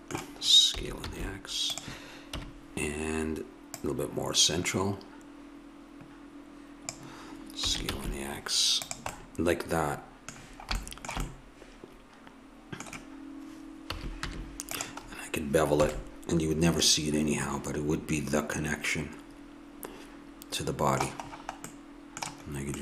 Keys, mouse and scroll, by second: 0.7 s, 2.3 KP_1, 3.8 click, 7.6 s, 13.9 a, 14.3 Tab, 15.9 a, 18.0 middle click, 22.6-22.8 middle drag.